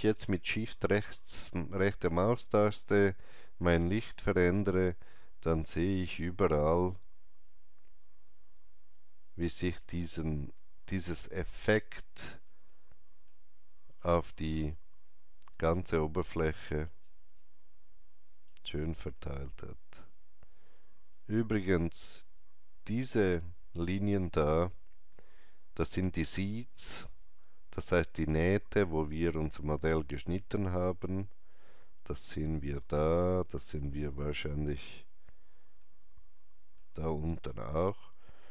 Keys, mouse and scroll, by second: 0.8 shift+right click, 12.7 middle click, 19.1 alt+middle click, 21.1-32.0 alt+drag, 32.0 alt+click, 33.4 alt+click, 35.7 alt+middle click.